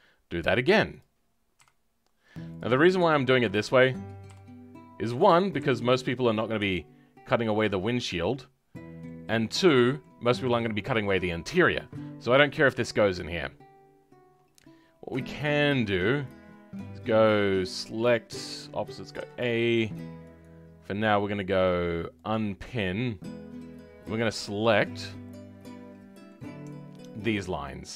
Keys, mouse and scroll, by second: 8.3 middle click, 9.2-9.6 scroll up 2, 9.6-17.6 middle drag, 17.6 click, 19.1 a, 23.2 scroll up 2, 23.5-27.1 middle drag, 27.1 alt+click, 27.7-27.9 scroll down 2.